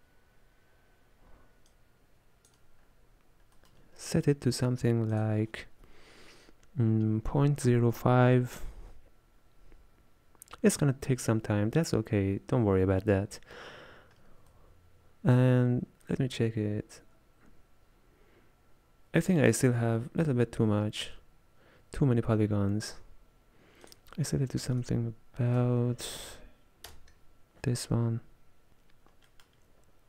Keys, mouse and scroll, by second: 1.9-3.2 drag, 3.2-3.9 scroll down 1, 3.9 middle click, 4.3-8.5 scroll up 1, 9.2 click, 14.6-15.6 middle drag, 15.6-16.2 scroll up 2, 16.2-19.2 middle drag, 19.8-20.2 scroll down 3, 20.2 middle click, 20.6-21.1 scroll up 1, 29.4 middle click, 29.9-30.0 scroll up 2.